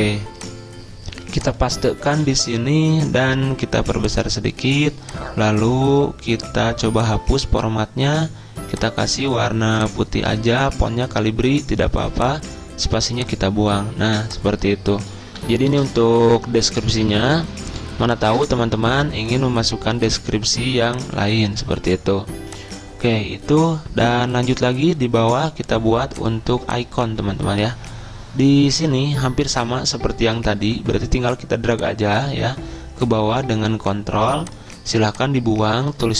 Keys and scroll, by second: 2.4 ctrl+v, 4.0 ctrl+v, 15.6 Delete, 17.0 BackSpace, 17.2 BackSpace, 18.3 ,.